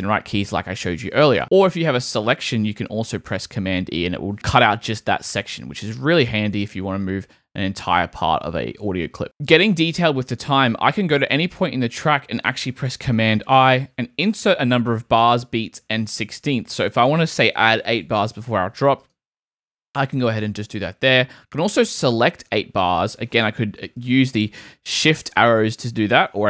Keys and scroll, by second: 3.3 super+e, 13.1 super+i, 18.0 8, 20.7 super+z, 23.7 Right, 24.6 Right.